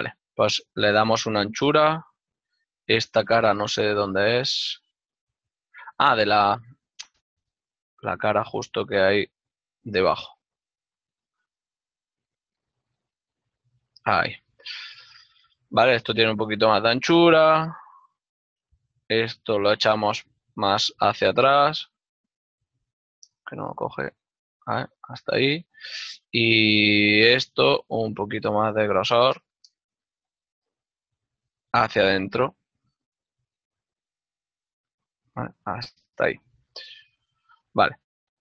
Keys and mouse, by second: 2.0 ctrl+click, 2.4 right click, 3.5 g, 4.9 right click, 6.0 middle click, 9.3 click, 9.5 right click, 9.8 z, 11.4 click, 12.6 ctrl+z, 13.1 x, 13.8 click, 14.1 z, 15.2 click, 17.6 ctrl+middle click, 18.5 ctrl+middle click, 19.5 middle click, 21.0 x, 21.8 t, 26.0 z, 28.1 click, 30.5 shift+middle click, 32.5 middle click, 32.8-33.7 typing, 35.1 ctrl+click, 36.7 middle click.